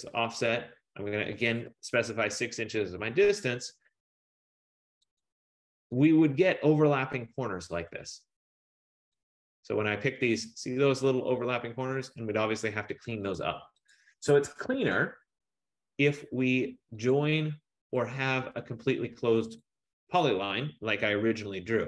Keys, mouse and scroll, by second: 1.7-2.5 typing, 5.3 click, 6.2 click, 9.4 click, 10.2 click, 13.5 click, 14.0 click, 14.6 Escape, 14.9 Escape, 17.1 click, 18.1 click, 19.8 click.